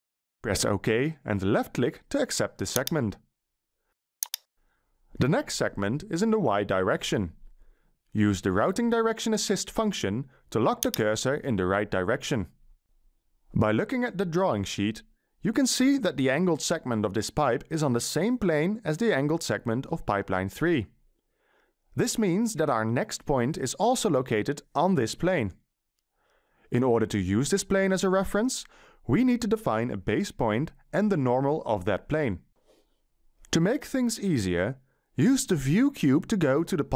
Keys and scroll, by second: 0.1 0, 34.5-36.3 ctrl+shift+scroll, 36.3-36.9 ctrl+shift+scroll.